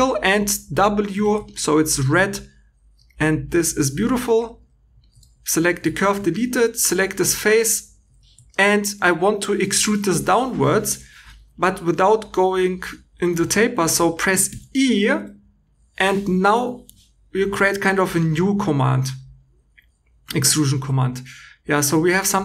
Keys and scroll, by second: 1.1 w, 5.2 2, 5.6 x, 6.2 3, 8.0 Escape, 9.5 e, 10.1 Escape, 10.8 e, 13.5 Escape, 14.4 e.